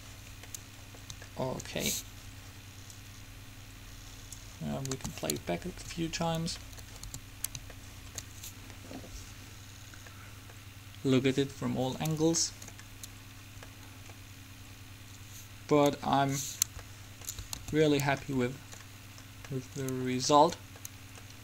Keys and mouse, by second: 3.1-4.7 drag, 5.1 alt+a, 7.3 a, 9.7 middle click, 16.2 Escape, 17.8 alt+a.